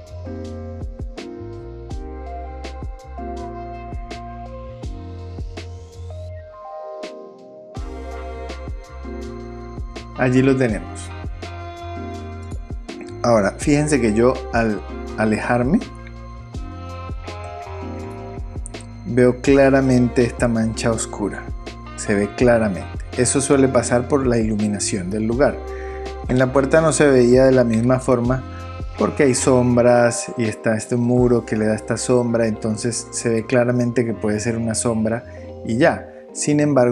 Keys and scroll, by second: 1.2 super+v, 1.5 super+d, 27.8 super+0.